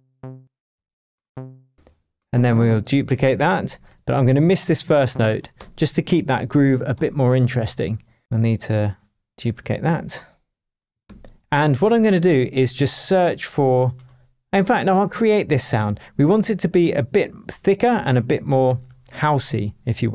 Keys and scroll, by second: 0.7 space, 3.6 super+d, 5.5 BackSpace, 6.4 shift+BackSpace, 6.9 shift+Tab, 11.0 super+d, 18.6 super+l.